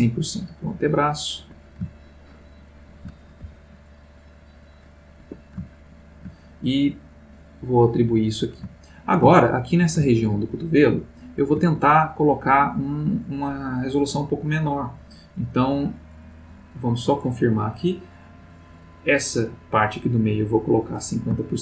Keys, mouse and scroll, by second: 1.4 Escape, 2.0-3.3 shift+middle drag, 3.5 shift+c, 3.8-5.2 shift+drag, 5.2 Escape, 5.7 shift+middle click, 7.3 click, 8.1 click, 8.8-10.0 ctrl+middle drag, 10.4-11.7 ctrl+middle drag, 17.2 click, 20.1 click.